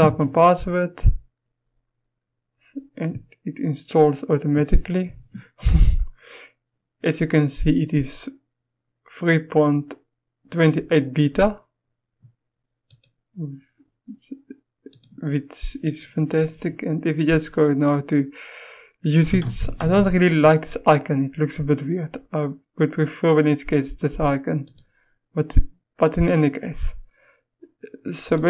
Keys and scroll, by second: 0.0 Return, 19.2-19.8 typing.